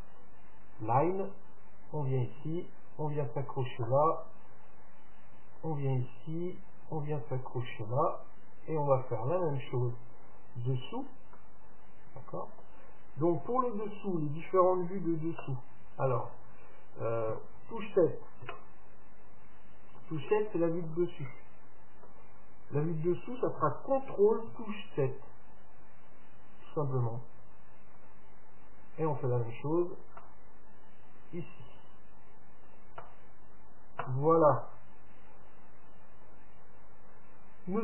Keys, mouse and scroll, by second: 17.3 KP_7, 18.4 KP_Decimal, 20.4-23.2 middle drag, 28.0-30.0 drag, 34.5-36.4 right drag.